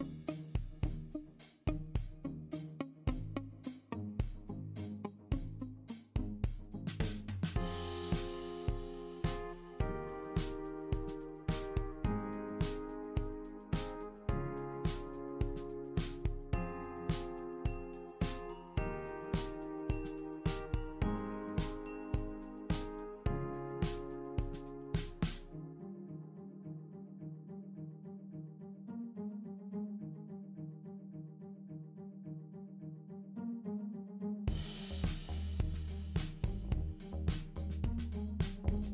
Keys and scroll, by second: 5.0 super+c, 5.1 super+v, 6.0 super+v, 17.8 BackSpace, 25.3 l, 31.4 typing, 32.7-33.6 typing, 38.0 ctrl+g, 38.6 super+g.